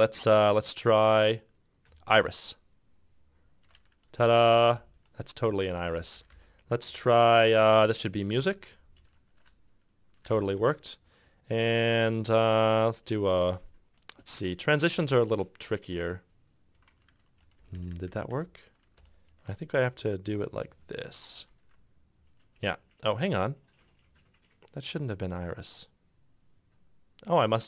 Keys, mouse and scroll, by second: 2.0 s, 3.8-6.3 typing, 8.5 b, 10.5 f, 15.1 q, 17.1 f, 17.7 g, 17.9 g, 18.1 g, 19.2 shift+click, 20.8 q, 22.8 shift+click, 25.4 q, 27.3 shift+click.